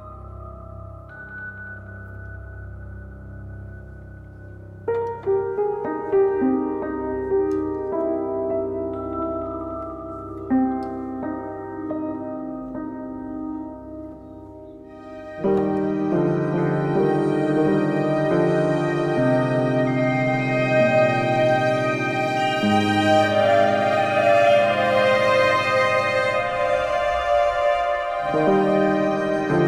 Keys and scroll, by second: 0.4 super+Left, 4.9 Down, 5.6 Left.